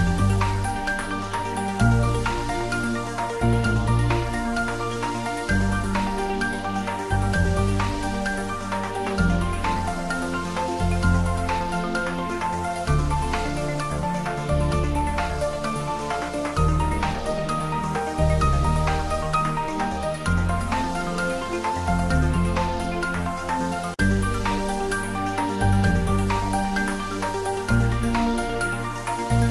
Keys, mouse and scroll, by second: 0.1 z, 3.3 click, 3.5 scroll down 1, 3.6 middle click, 4.1 click, 4.5 shift+z, 4.8-7.5 middle drag, 7.5 scroll up 1, 8.0 click, 8.6-9.1 scroll up 1, 9.2 shift+click, 13.2-16.5 typing, 17.3 click, 21.1 scroll up 1, 21.3 middle click, 21.9 scroll down 1, 22.0-23.2 middle drag, 23.2 ctrl+3, 23.6 scroll up 1, 23.9-25.5 middle drag, 25.5 click, 26.5 Tab, 26.9 ctrl+r, 27.4 click, 28.7 ctrl+r, 29.0 click.